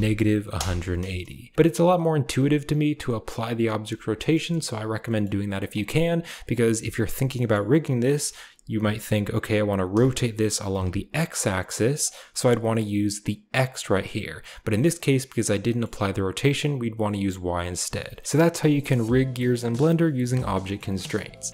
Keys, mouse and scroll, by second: 5.1 middle click, 5.6 middle click, 5.9 click, 7.4 middle click, 8.2 shift+middle click, 9.9 r, 15.7 click, 18.2 ctrl+s, 18.3-19.5 drag, 20.5 shift+middle click, 20.8 middle click.